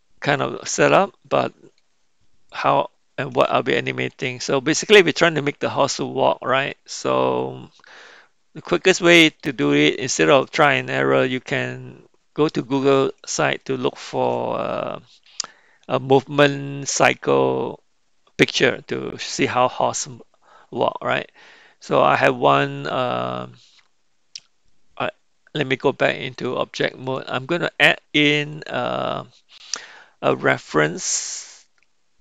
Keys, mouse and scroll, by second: 2.4 middle click, 3.8 shift+middle click, 4.4-5.7 middle drag, 7.4-9.4 middle drag, 13.6-14.2 shift+middle drag, 26.3-27.4 drag, 28.5-32.2 drag.